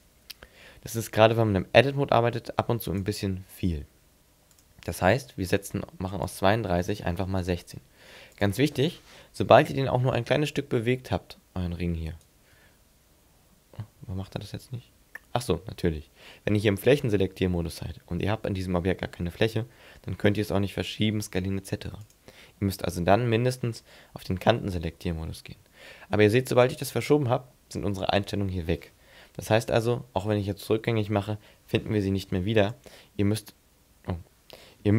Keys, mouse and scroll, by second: 2.8 click, 6.3 click, 10.1 g, 12.1 shift+right click, 12.7 g, 14.0 g, 14.4 middle click, 14.9 g, 22.0 click, 25.2 g, 26.7 click, 29.5 ctrl+z, 32.3 x.